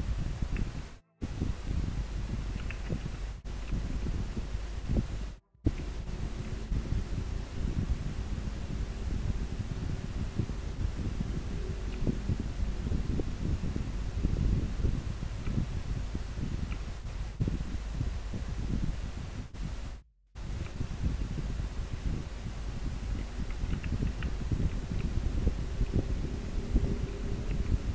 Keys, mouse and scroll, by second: 3.5 scroll down 1, 6.6 scroll up 1, 23.3 scroll down 1, 25.9 scroll up 1.